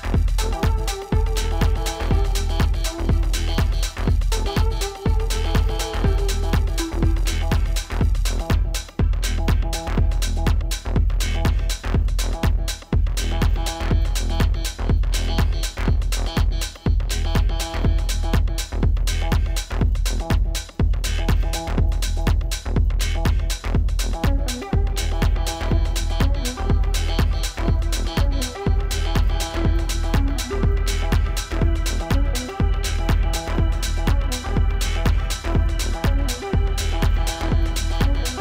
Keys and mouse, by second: 0.9-1.8 typing, 1.6 click, 4.9 space, 5.1 click, 5.4 space, 6.8-9.4 typing, 8.3 click, 8.5 ctrl+z, 9.3 click, 11.0 ctrl+z, 12.5 -, 12.7 space, 13.3 ctrl+0, 13.9 -, 16.4-17.7 typing, 19.8 click, 28.8 click, 30.9 click, 32.0-32.4 typing, 32.8 ctrl+z, 33.5 z, 34.1 ctrl+z, 34.6 click, 35.7 ctrl+z, 37.4 z.